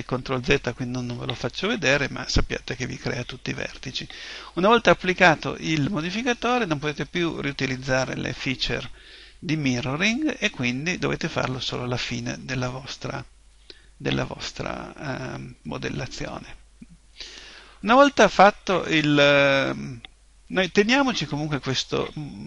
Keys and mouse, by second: 17.1-20.4 middle drag.